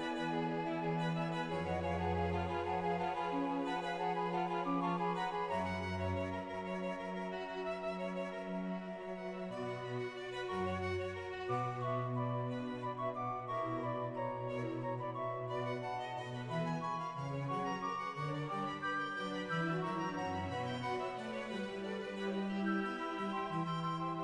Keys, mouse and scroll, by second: 0.2 shift+middle click, 0.2-1.1 scroll up 2, 1.1 right click, 1.1 2, 1.5 ctrl+r, 1.5 right click, 1.6 right click, 1.6 1, 2.2 click, 2.2 g, 2.6 scroll up 1, 2.8 click, 2.8-4.7 scroll down 1, 2.8 e, 4.7 e, 4.8 click, 5.6 shift+middle click, 5.6-6.6 scroll down 3, 6.6 g, 6.7-7.7 scroll down 4, 7.7 click, 7.7-9.8 typing, 8.1 right click, 8.1 click, 8.6 scroll down 4, 8.8 scroll down 3, 9.1 right click, 9.1 click, 9.4 shift+middle click, 9.4 scroll up 1, 9.5 right click, 10.6-11.7 scroll up 1, 11.7 right click, 11.7-12.0 scroll up 3, 11.7 g, 12.0 click, 12.0 scroll down 1, 12.7 scroll down 1, 13.1 right click, 13.1-14.0 scroll up 4, 14.0 shift+right click, 14.0 click, 14.0 e, 14.8 right click, 15.5 ctrl+z, 16.6 click, 18.6 click, 18.8-19.5 scroll down 1, 19.5 shift+middle click, 19.5 shift+scroll up 1, 19.7-20.5 scroll down 1, 20.5 right click, 20.5 g, 22.8 shift+middle click, 22.8-23.8 scroll down 1, 23.8 shift+click.